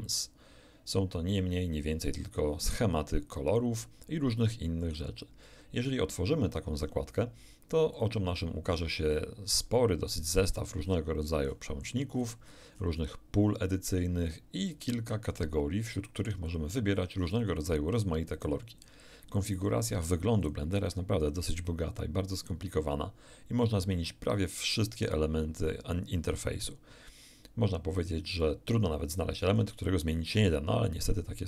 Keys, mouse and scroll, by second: 0.1 click, 7.9 click, 10.4 scroll down 1, 11.2 scroll down 1, 11.5 scroll up 1, 12.4 middle click, 12.7-13.0 scroll up 1, 14.7 click, 15.3 click, 15.9 click, 16.5 click, 16.9 click, 17.4 click, 17.9 click, 18.3 click, 18.8 click, 19.5-20.2 drag, 20.4 click, 20.8 click, 21.2 click, 22.4 click, 28.4-29.7 drag.